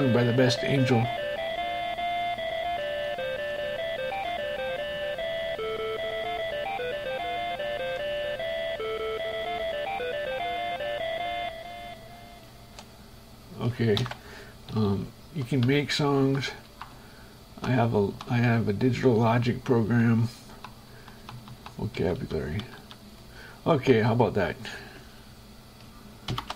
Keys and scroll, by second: 12.7 shift+Escape, 15.0 Page_Down, 15.9 Up, 17.1 Right, 22.2 Down, 24.1 shift+Escape.